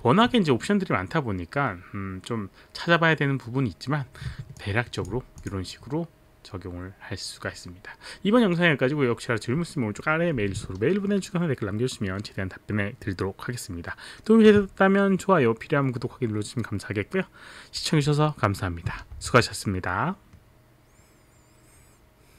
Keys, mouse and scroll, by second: 4.6 alt+click.